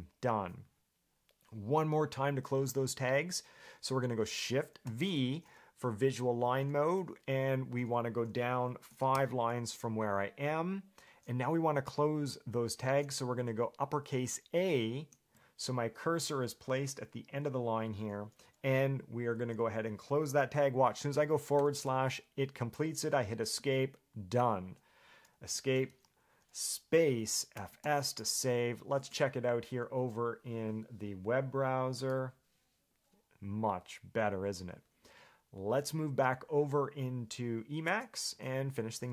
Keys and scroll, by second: 5.0 shift+v, 9.1 5, 9.3 j, 15.1 shift+a, 19.5 shift+,, 21.7 /, 23.7 Escape, 25.6 Escape.